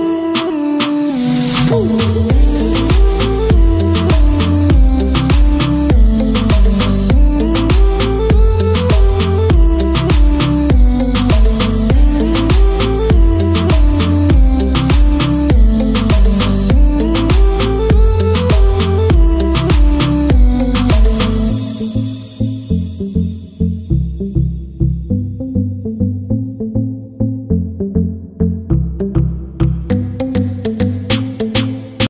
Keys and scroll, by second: 1.7 shift+., 3.3 shift+c, 4.2 shift+s, 7.4-11.7 typing, 14.7 ctrl+s.